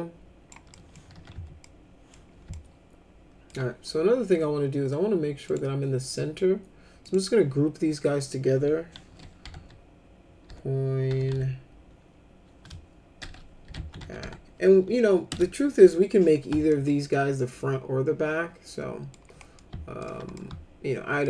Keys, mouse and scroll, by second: 0.7 middle click, 0.9-1.8 typing, 1.6 middle click, 2.5 alt+middle click, 5.5 click, 7.0 click, 9.4 c, 10.5-11.8 typing, 12.9-14.7 typing, 15.3 Return, 16.7-19.1 alt+middle drag, 19.6 alt+middle click, 20.4 alt+middle click.